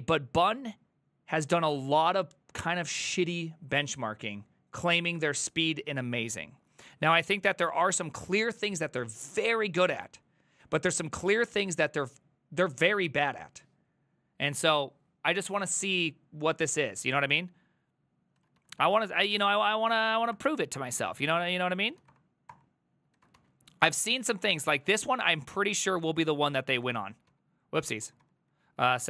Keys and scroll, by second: 17.0 alt+{, 18.4 ctrl+a, 18.6 2, 18.8 ctrl+a, 18.8 ctrl+c, 19.4 ctrl+a, 19.5 ctrl+a, 19.8 ctrl+c, 20.0 ctrl+c, 20.2 ctrl+c, 20.4 Up, 21.1 Up, 21.5 ctrl+c, 21.7-23.4 typing, 22.5 Return, 23.2 ctrl+a, 23.9 Up, 24.4 Up, 24.7 Down, 25.1-27.4 typing, 26.1 ctrl+a, 28.1 Escape, 28.2 Escape, 28.7-29.0 typing.